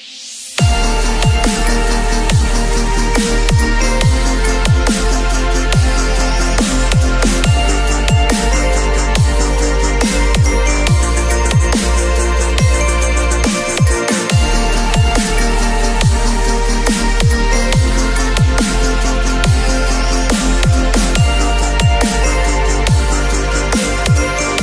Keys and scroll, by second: 6.9 ctrl+[, 17.8 space, 20.1 space, 22.1 ctrl+v, 22.4 ctrl+t.